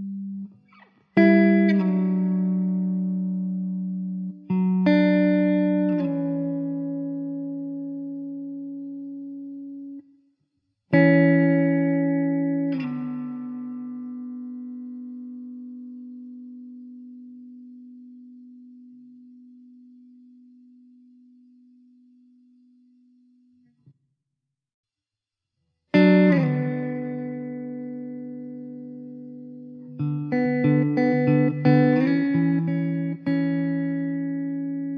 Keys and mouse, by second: 2.3 w, 13.5 e, 15.9 middle click, 18.6 middle click, 27.7 middle click, 29.0 middle click.